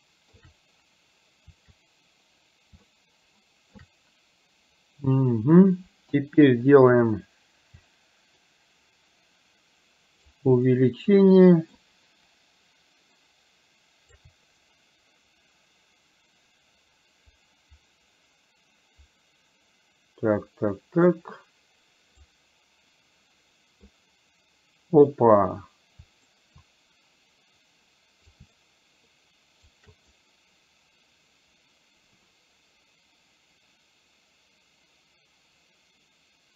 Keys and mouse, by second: 3.1 shift+middle click, 8.4-10.4 shift+right drag, 10.8-11.8 shift+middle drag, 13.2-14.3 shift+right drag, 14.7-22.3 right drag, 26.3-28.4 shift+right drag, 29.3 shift+right click, 30.2-36.5 right drag.